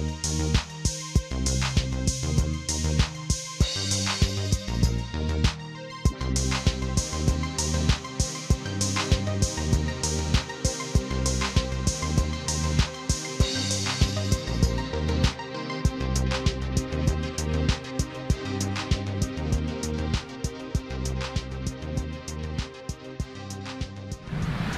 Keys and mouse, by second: 0.8 click, 2.1 click, 3.7 click, 4.6 click, 6.1 click, 7.4 click, 9.8 click, 11.4 click, 12.9 click, 15.8 click, 17.3 click, 23.2 click.